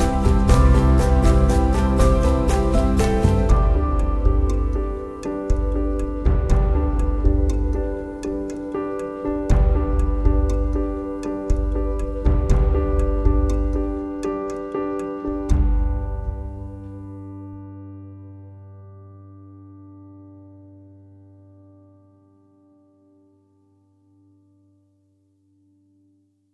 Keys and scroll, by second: 0.1 super+f, 1.9 super+y, 3.2 super+f, 4.1 super+y, 4.6 super+y, 7.0 super+f, 8.2 shift+super+g, 8.7 super+f, 10.2 super+z, 11.1 shift+super+9, 12.8 super+c, 13.2 super+f.